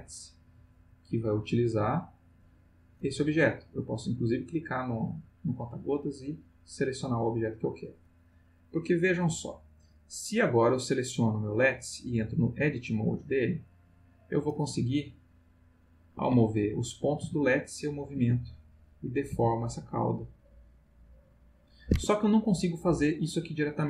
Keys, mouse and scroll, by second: 1.4 click, 2.3 click, 3.2 click, 3.9 click, 6.4 click, 10.4 click, 12.2 click, 12.8 click, 13.7-14.4 drag, 14.7 g, 16.2 Escape, 16.7 click, 17.2 g, 18.1 Escape, 18.7 click, 19.3 g, 21.9 Escape.